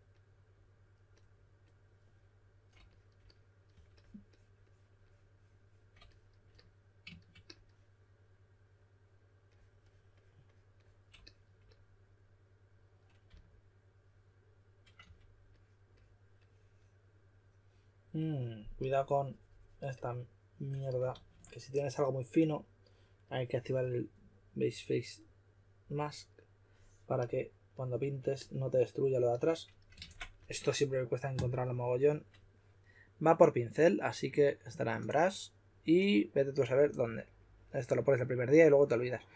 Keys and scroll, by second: 3.7 3, 13.2 s, 14.7-15.5 typing, 21.1 super+z, 29.9 super+z.